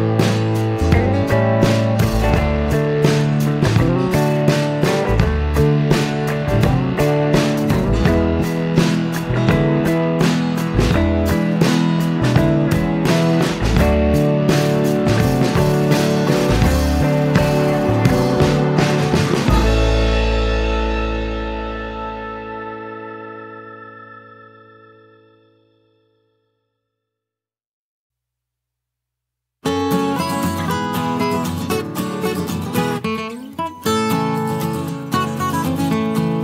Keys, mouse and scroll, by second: 0.5 click, 2.3 click, 3.8 click, 5.5-7.4 drag, 8.1 F1, 8.9-12.3 ctrl+drag, 12.7 click, 17.2 click, 18.4 click, 19.2 click, 20.3-22.9 drag, 23.5 space, 26.1 click, 29.1 KP_Subtract, 31.8 KP_Add, 33.0 KP_Add, 34.0 space, 36.1 click.